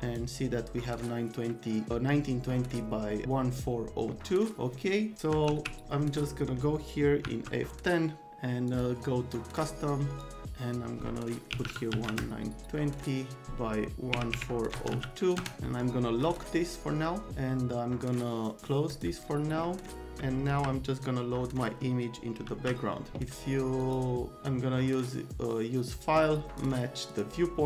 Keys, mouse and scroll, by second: 5.5 alt+q, 6.3 right click, 7.2 F10, 8.7 click, 9.3 click, 10.2 click, 11.5 KP_1, 11.7 KP_9, 11.9 KP_2, 12.0 KP_0, 14.1 KP_1, 14.3 KP_4, 14.7 KP_0, 14.9 KP_2, 15.3 KP_Enter, 16.2 click, 18.8 click, 22.4 alt+c, 23.8 click, 26.5 click, 27.1 click.